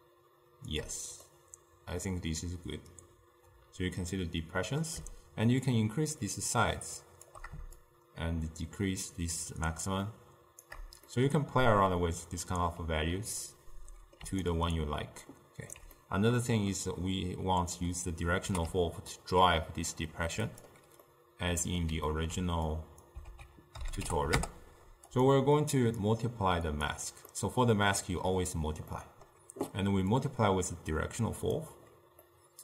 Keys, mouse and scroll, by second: 1.3-4.4 middle drag, 5.7-10.9 shift+drag, 11.1 scroll down 2, 11.2-14.3 middle drag, 14.3 d, 14.5-16.0 right drag, 16.0-18.5 middle drag, 18.5 g, 21.1-22.8 middle drag, 22.8 click, 23.3 ctrl+a, 25.9-27.3 drag, 27.3-30.2 middle drag, 30.2-32.3 drag, 32.3-32.6 middle drag.